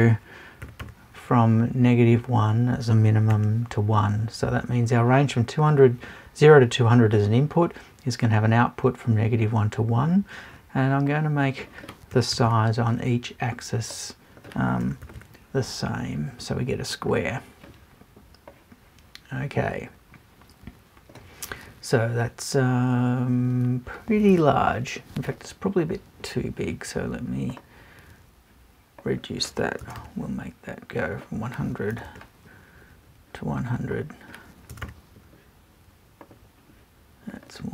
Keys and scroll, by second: 29.8 BackSpace, 31.9 BackSpace, 34.7 BackSpace.